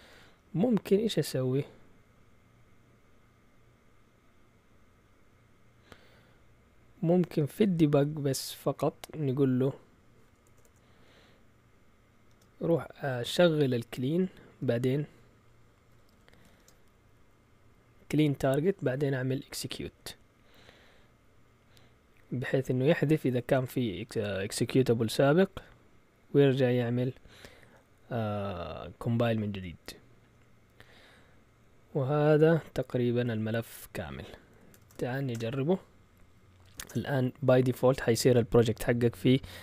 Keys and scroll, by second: 0.0 Up, 0.2 Up, 7.1 Return, 10.4 BackSpace, 10.6 BackSpace, 12.3 space, 13.5 Left, 14.1 Left, 14.2 Left, 14.3 Left, 14.3 Left, 14.5 Left, 14.8 Right, 15.8-17.4 typing, 19.9 Down, 20.2 typing, 24.8 Down, 25.1 Down, 25.4 Down, 25.6 Down, 29.3 Up, 29.9 Up, 30.0 Up, 30.0 Up, 30.1 Up, 30.2 Up, 30.3 Up, 30.7-32.2 typing, 32.2 Up, 34.5 Escape, 34.5-35.3 typing, 35.3 Return, 36.4-37.1 typing.